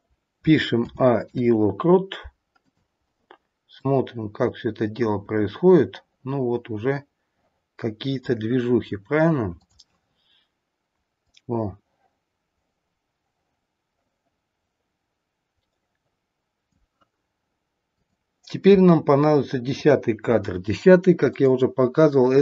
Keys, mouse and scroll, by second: 0.8 a, 1.1 i, 3.8 click, 9.6 click, 11.1 click, 18.0 click, 19.7 click, 21.3 click.